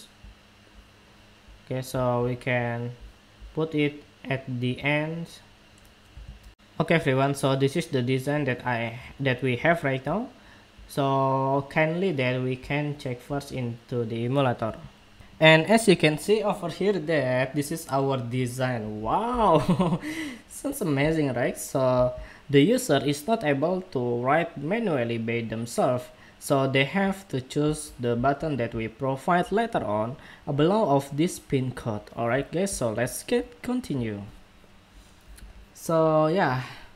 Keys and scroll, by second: 6.2 shift+super+2.